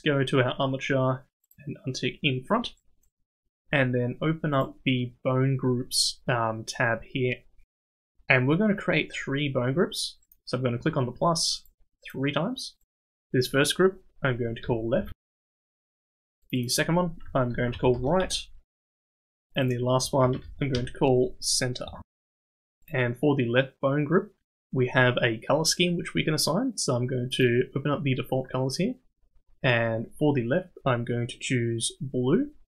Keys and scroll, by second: 16.0 Tab.